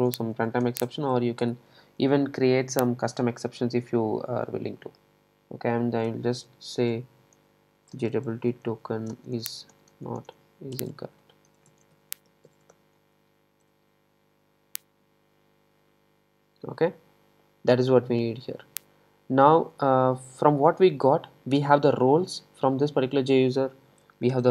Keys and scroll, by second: 24.4 alt+super+l.